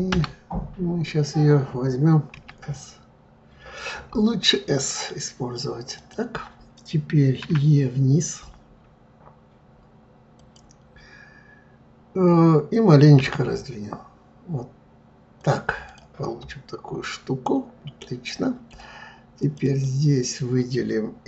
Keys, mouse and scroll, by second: 2.3 s, 7.4 e, 13.2 s, 15.8 click, 16.4-19.4 middle drag, 19.4 click, 19.6 click.